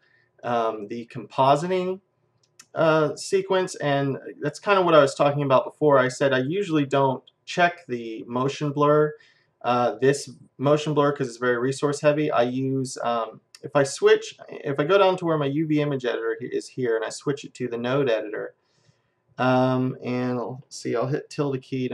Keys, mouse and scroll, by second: 16.7-18.7 drag, 19.5-21.5 middle drag.